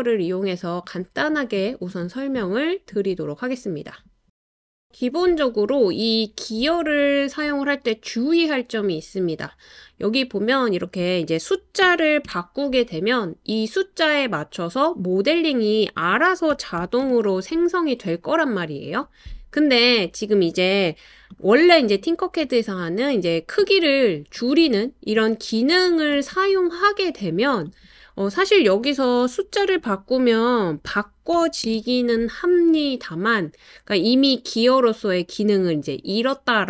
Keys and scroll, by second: 11.6-12.7 typing, 16.3-17.0 typing, 21.7-22.4 typing, 30.9-31.3 typing, 31.6 Return.